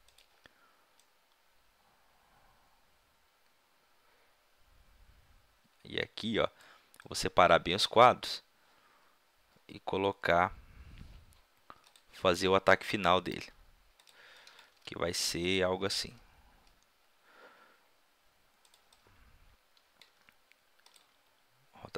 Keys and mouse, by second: 0.2-2.9 drag, 7.1-11.8 middle drag, 11.8-12.5 drag, 12.6-13.0 middle drag, 13.9 r, 14.1-14.6 drag, 14.6 g, 15.9 r, 16.6 drag, 17.2 middle drag, 18.7-19.2 drag, 20.3 g, 20.9 click, 21.1 r.